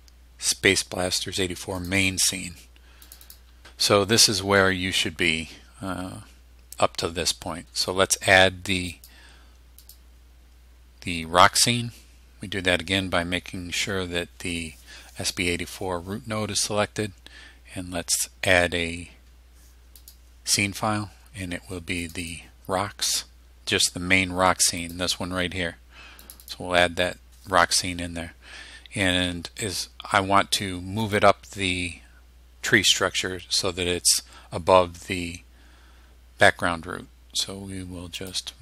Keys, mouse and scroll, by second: 1.8 click, 3.1 click, 8.9 click, 9.8 click, 20.0 click, 22.1 click, 24.8 click, 26.3 click, 31.1 click, 38.2 click.